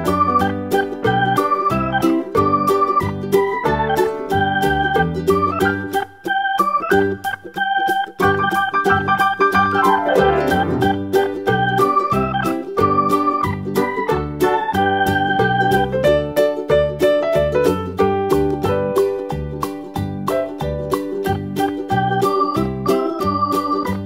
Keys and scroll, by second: 17.7 BackSpace.